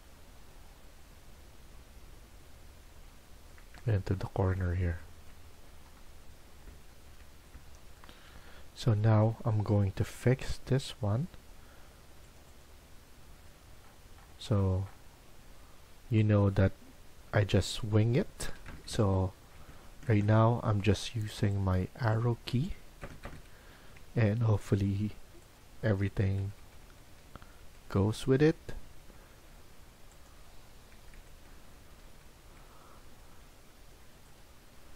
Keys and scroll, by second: 18.4 Right, 18.5 Right, 18.9 Right, 19.0 Right, 19.5 Right, 19.9 Right, 20.1 Right, 20.4 Escape, 20.7 Escape, 22.9 Right, 23.2 Right, 23.6 Escape, 23.9 Escape, 26.3 Right, 26.5 Right, 26.9 Right, 27.0 Right, 27.2 Right, 27.5 Right, 27.7 Right, 28.7 Escape, 29.1 Escape, 30.9 Right, 31.1 Right, 31.3 Right, 31.5 Right, 31.6 Right, 31.9 Right, 32.0 Right, 32.4 Right, 33.2 Escape.